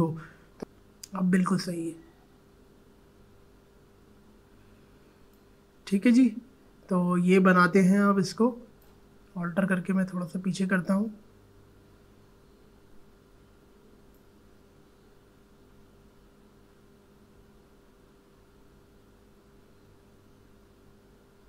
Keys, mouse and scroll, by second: 0.6 Return, 5.3-9.2 drag, 9.4 alt+scroll down 1, 12.9 alt+scroll down 1, 14.1-21.4 drag.